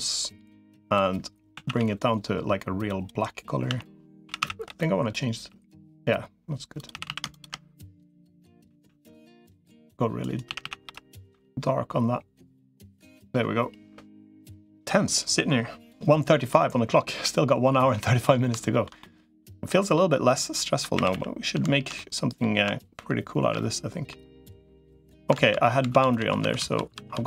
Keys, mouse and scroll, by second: 1.4 a, 1.6 g, 3.6-5.2 typing, 6.8 a, 7.0 a, 8.6 a, 8.8 g, 10.4 a, 10.6 b, 11.2 g, 18.4 shift+middle click, 18.8 middle click, 20.6 2, 20.8 a, 21.0 a, 21.7 middle click, 23.3 middle click, 24.4 3, 25.2 ctrl+z, 25.4 ctrl+z, 25.6 ctrl+z, 25.8 ctrl+z, 26.0 ctrl+z, 26.2 ctrl+z, 26.4 ctrl+z, 26.6 ctrl+z, 26.8 ctrl+z, 27.0 ctrl+z, 27.2 ctrl+z.